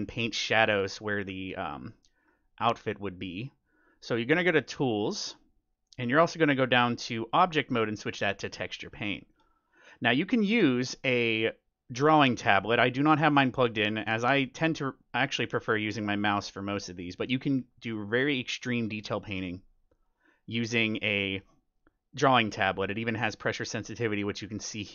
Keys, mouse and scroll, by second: 1.4 middle click, 1.7-3.4 scroll up 1, 3.4 middle click, 4.1-4.9 scroll down 1, 4.9-5.5 scroll down 1, 5.1-7.0 drag, 7.4-9.1 drag, 9.0-10.8 middle drag, 9.2 click, 14.0-17.2 middle drag, 17.3-20.5 middle drag.